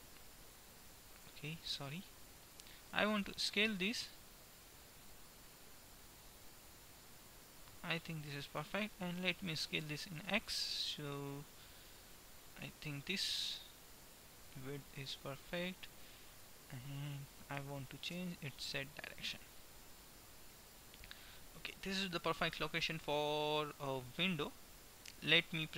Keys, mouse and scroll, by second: 2.9 s, 9.9 s, 14.7-16.0 middle drag, 17.7 g, 21.4-23.9 middle drag.